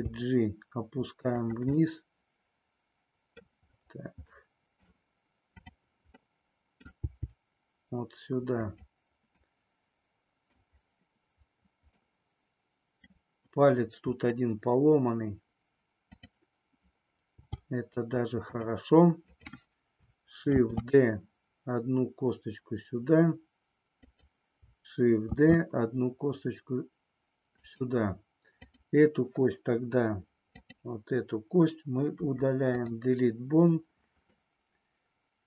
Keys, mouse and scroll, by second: 2.0-3.5 middle drag, 4.3-4.8 scroll up 2, 4.8-5.5 scroll down 2, 5.5 click, 6.3 middle click, 7.0 g, 8.6 click, 9.6-10.6 middle drag, 12.3 middle click, 16.0 click, 17.4 g, 18.5 click, 20.5 shift+d, 24.0 click, 25.3 shift+d, 27.6 click, 32.0 Delete, 34.4-35.4 middle drag.